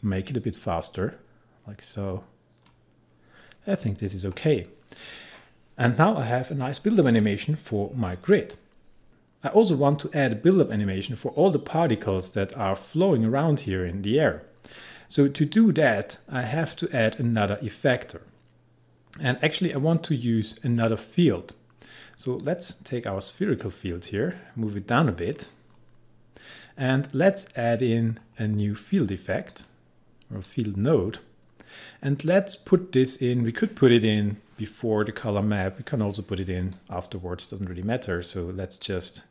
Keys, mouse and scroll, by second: 22.5-27.9 drag, 29.5-36.8 drag, 36.8-39.3 drag.